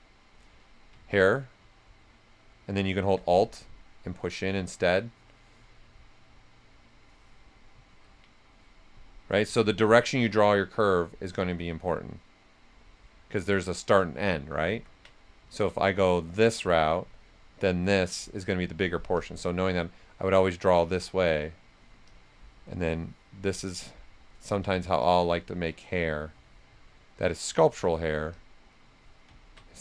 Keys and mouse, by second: 0.9 ctrl+z, 1.7-3.2 alt+drag, 3.2 right click, 4.5 ctrl+z, 5.9-7.8 drag, 7.8 ctrl+x, 9.4 ctrl+z, 10.6-12.2 drag, 12.2-15.1 drag, 15.1 ctrl+z, 16.1-17.7 drag, 17.7-19.1 drag, 19.1 click, 21.1 click, 22.0-28.3 drag, 28.7 right click.